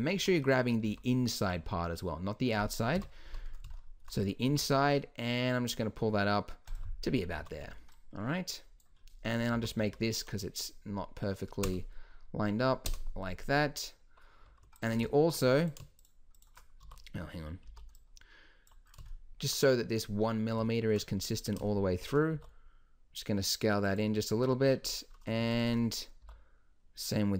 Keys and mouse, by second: 0.1 z, 0.9 z, 1.5 z, 2.9 KP_1, 3.3 z, 4.5 g, 7.4 a, 7.6 b, 9.5 s, 14.7-16.8 drag, 16.8 a, 17.7 click, 17.7 b, 18.9 middle click, 19.5 click, 22.3 s, 25.5-26.5 drag, 26.2 s.